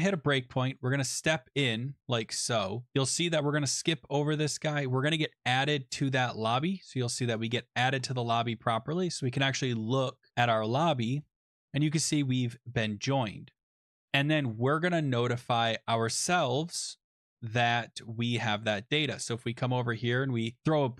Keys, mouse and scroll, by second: 0.8 click, 1.3 click, 5.0 click, 6.5 click, 7.5 click, 9.3-10.6 scroll, 11.3 click, 14.5 click, 18.6 click, 19.0-20.8 scroll, 20.8 click.